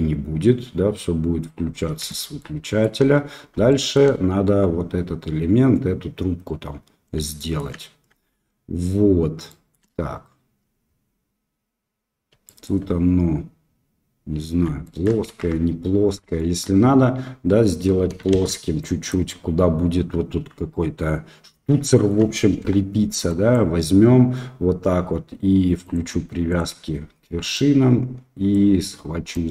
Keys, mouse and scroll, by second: 1.0 scroll up 2, 2.1 shift+middle click, 2.7 shift+middle click, 3.8 shift+middle click, 7.4 shift+middle click, 9.4 shift+drag, 12.5 shift+click, 14.8 shift+middle click, 15.3 Tab, 16.3 shift+middle click, 18.3 shift+z, 18.7 click, 21.8 shift+middle click, 22.6 1, 23.4 click, 25.8-28.2 drag, 29.3-29.5 drag.